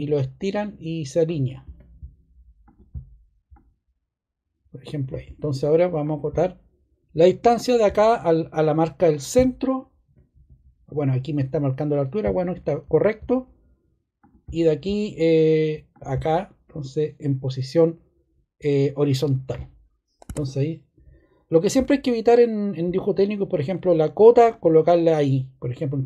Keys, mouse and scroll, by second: 20.2 scroll.